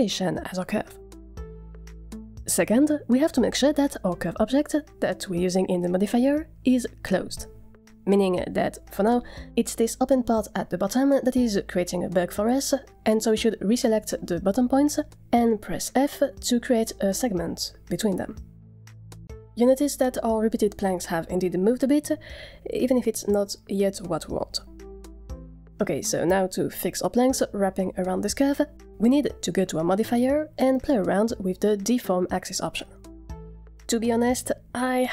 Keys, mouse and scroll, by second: 0.0 n, 2.5 scroll up 1, 2.5 shift+middle drag, 5.3 click, 5.7 click, 8.8 click, 13.4 Tab, 14.1 click, 15.6 f, 17.3 shift+middle click, 17.6 scroll down 1, 17.7 shift+middle click, 18.0 Tab, 29.7 click, 31.9-35.1 drag.